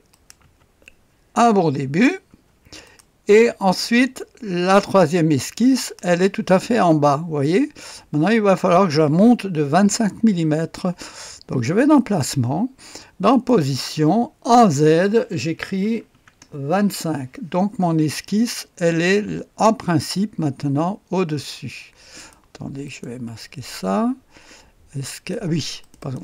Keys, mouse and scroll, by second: 0.3 click, 2.2-3.4 typing, 2.8 click, 3.4 click, 4.9 space, 5.7 click, 11.9 click, 13.3 middle click, 13.5 click, 14.5 middle click, 14.7 click, 15.8 KP_2, 16.1 KP_5, 16.4 Return, 22.1 click, 23.0 click, 23.4 space, 25.3 click, 25.9 click.